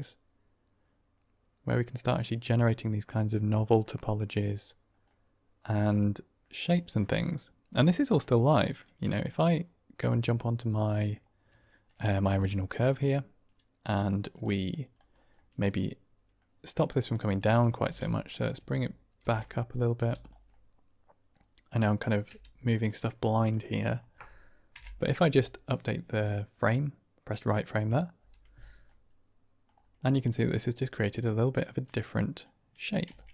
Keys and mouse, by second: 1.1-2.9 middle drag, 3.7-4.6 middle drag, 5.0-6.4 middle drag, 6.8 shift+middle click, 7.0-7.7 middle drag, 8.1-8.4 middle drag, 8.9 click, 9.4-11.1 middle drag, 11.6 shift+drag, 11.9 drag, 12.2 Tab, 12.7 click, 13.0-14.6 middle drag, 14.9 click, 15.2-16.3 drag, 17.0-19.9 typing, 18.2 click, 19.6 click, 20.1 click, 20.4 middle click, 21.6 middle click, 22.2 g, 22.6 click, 23.3 shift+click, 23.6 middle click, 26.6 Right, 28.8 middle click, 30.0-32.3 middle drag, 33.0 Tab.